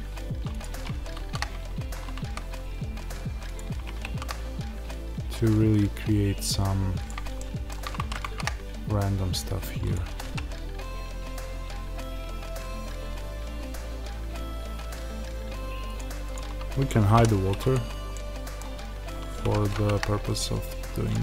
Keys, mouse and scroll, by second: 0.5 click, 0.6 g, 3.5 click, 3.7 g, 7.0 click, 7.3-9.8 middle drag, 9.8 click, 10.0 r, 15.9 click, 17.1 h, 17.6 click, 18.0-19.4 middle drag, 19.4 g, 21.0 click.